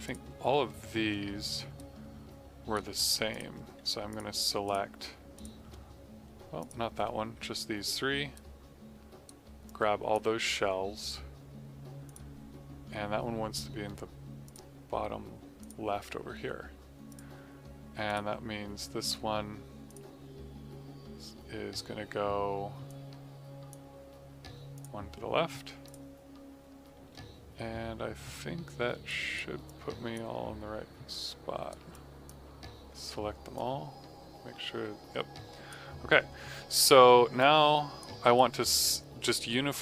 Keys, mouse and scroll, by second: 1.7 right click, 3.2 click, 4.0 click, 4.6 click, 5.3 click, 6.5 click, 8.3 right click, 9.6 click, 22.8 click, 27.7 q, 29.0 alt+right click, 29.6 click, 31.1 right click, 31.9 click, 38.3 right click.